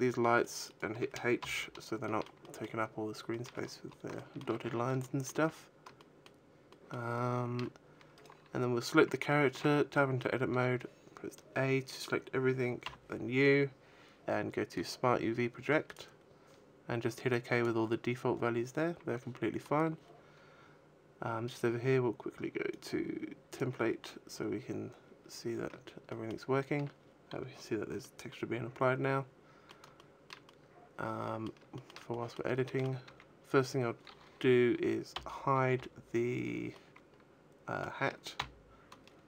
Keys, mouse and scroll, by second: 0.3 right click, 0.4 shift+right click, 1.3 h, 1.9 shift+middle click, 2.3 middle click, 3.2 shift+middle click, 3.5-4.6 scroll up 10, 4.4 shift+middle click, 4.8 shift+middle click, 5.9 shift+middle click, 6.6 shift+middle click, 7.9 right click, 9.4 Tab, 10.4 a, 12.7 u, 21.4 click, 25.9 shift+middle click, 27.7 middle click, 29.8 shift+middle click, 30.3 middle click, 31.6 shift+middle click, 32.0 middle click, 32.5 shift+middle click, 32.9 a, 35.6 l, 36.6 middle click, 38.1 h.